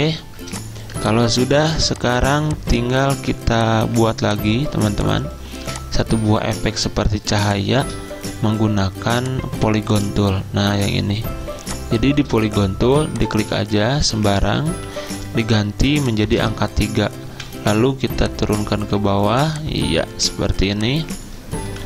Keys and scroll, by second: 0.3 z, 3.2 v, 4.0 z, 12.0-12.3 typing, 15.4 3, 17.4 v, 19.4 z, 21.7 v.